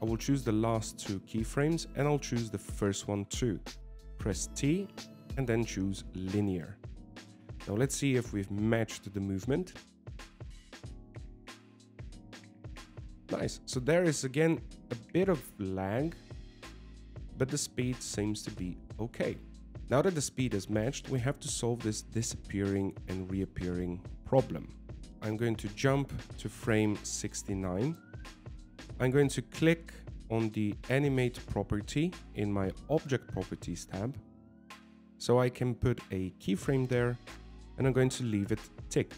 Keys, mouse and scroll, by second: 1.3 middle click, 3.5 middle click, 4.3 shift+right click, 5.8 t, 11.6 alt+a, 14.1 shift+middle click, 14.4 scroll up 2, 15.0 shift+middle click, 18.9 alt+a, 25.2 ctrl+z, 25.2 click, 27.0 click, 36.9 click.